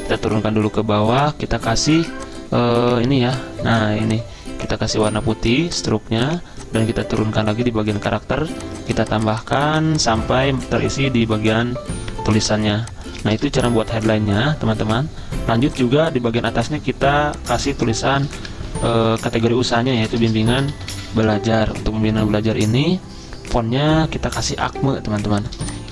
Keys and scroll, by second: 12.2 z, 13.4 v, 17.1-21.7 typing, 17.6 ctrl+a, 21.8 Escape, 24.8 ctrl+t, 25.8-25.9 typing.